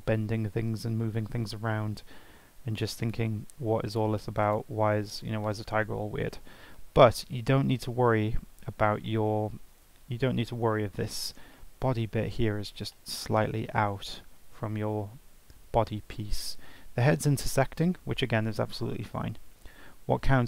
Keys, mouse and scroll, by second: 2.5 ctrl+Tab, 3.0 drag, 3.9 shift+click, 4.4 shift+click, 5.1 r, 7.0 ctrl+z, 7.4 ctrl+z, 7.7 ctrl+z, 8.1 ctrl+z, 8.4 ctrl+z, 9.1-9.7 middle drag, 9.7-10.2 scroll up 5, 10.2-17.0 middle drag, 17.0-17.6 scroll down 4, 17.6-20.1 middle drag.